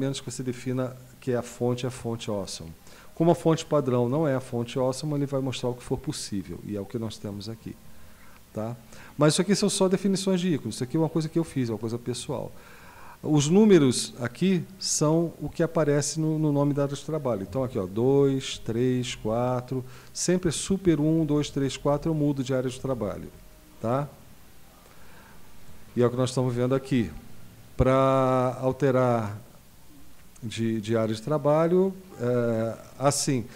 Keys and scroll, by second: 18.1 super+2, 18.5 super+3, 19.0 super+4, 20.5 super+1, 20.9 super+2, 21.2 super+3, 21.5 super+4, 21.8 super+5, 22.9 super+1.